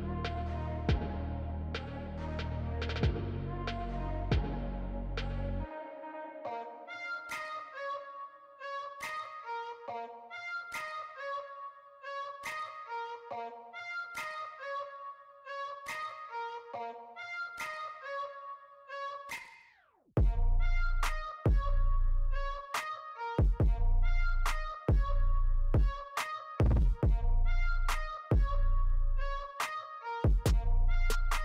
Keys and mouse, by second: 2.1 right click, 5.6 right click, 7.7 right click, 10.5 right click, 12.7 right click, 15.8 right click, 24.0 right click, 26.7 right click, 30.0 right click.